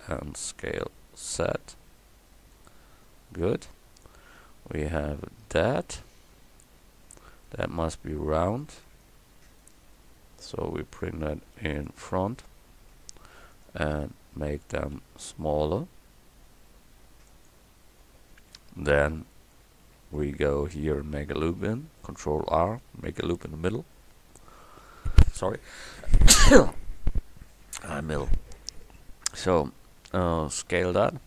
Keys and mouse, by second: 0.3 s, 7.5-8.8 drag, 9.9 Tab, 13.0 Tab, 15.0 s, 18.8 Up, 19.9 KP_1, 22.7 ctrl+r, 23.0 click, 23.0 middle click, 23.0 right click, 30.8 s.